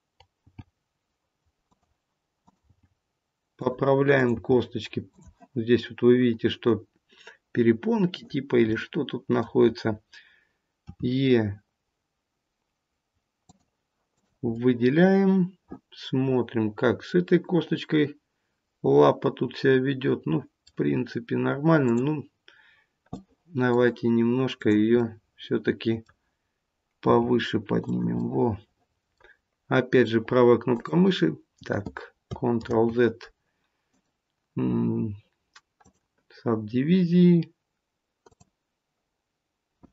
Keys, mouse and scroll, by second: 0.4 g, 2.3 click, 2.6 g, 4.1 click, 4.4 g, 8.0 click, 8.7 middle click, 10.8 e, 14.0 click, 14.5 middle click, 21.8 click, 23.0 middle click, 24.5 click, 27.0 g, 28.2 middle click, 29.8 right click, 32.5 ctrl+z, 33.8 right click, 38.1 click.